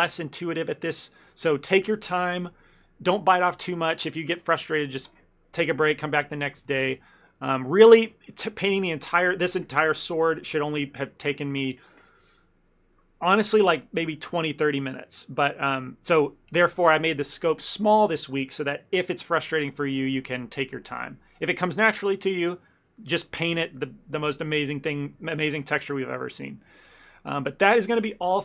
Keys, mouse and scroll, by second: 26.9 shift+middle click, 27.3 middle click.